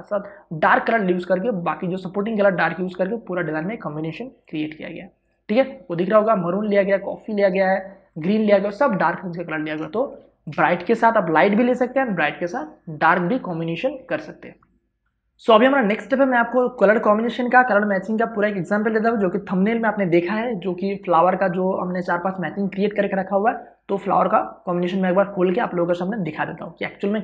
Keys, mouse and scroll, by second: 4.5 click, 9.9 space, 10.2 ctrl+click.